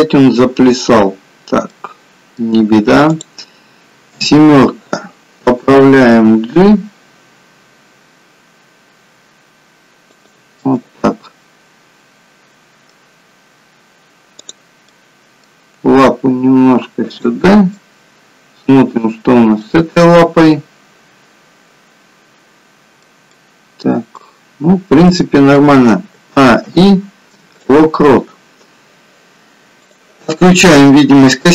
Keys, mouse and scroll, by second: 1.6 middle click, 3.0 click, 4.0 KP_7, 6.0 g, 10.5 middle click, 14.4 click, 14.8 middle click, 15.9 g, 17.7 middle click, 23.2 middle click, 26.0 a, 26.5 i, 29.9 click, 30.8 middle click.